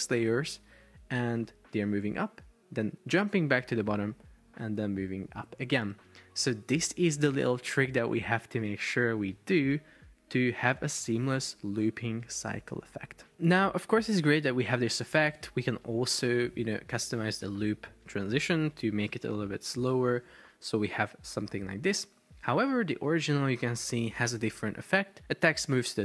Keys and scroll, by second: 13.3 super+p, 14.7 Escape, 19.6 5, 19.8 Return, 19.9 super+p, 22.8 super+Tab.